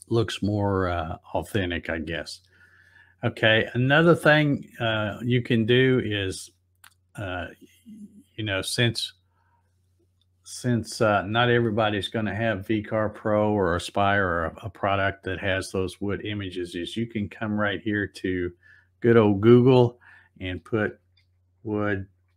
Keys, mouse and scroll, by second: 9.4-11.5 drag, 12.7 click, 17.4 click, 20.6 w, 21.6 space.